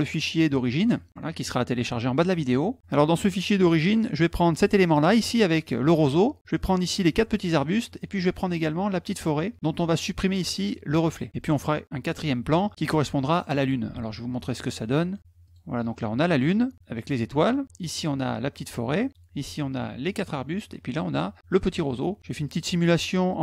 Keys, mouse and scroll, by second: 4.4 click, 5.0 middle click, 5.3 middle click, 6.7 click, 7.3 middle click, 8.5 click, 14.0 alt+Tab, 15.1 click, 15.4 click, 17.9 click, 19.4 click, 22.4 click, 23.3 click.